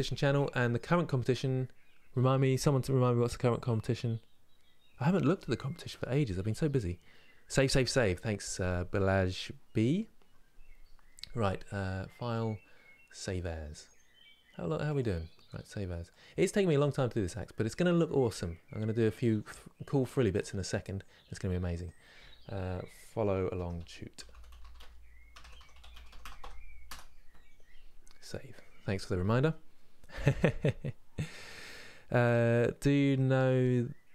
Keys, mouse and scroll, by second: 16.0-27.7 drag, 28.0-34.1 drag.